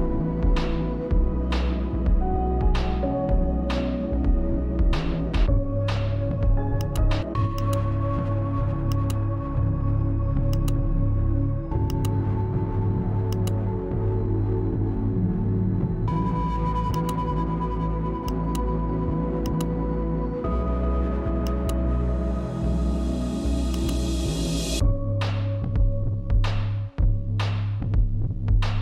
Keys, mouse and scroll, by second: 0.0-3.9 typing, 4.7-8.0 drag, 20.9 click, 23.5-24.4 typing, 26.7 click, 28.3-28.8 drag.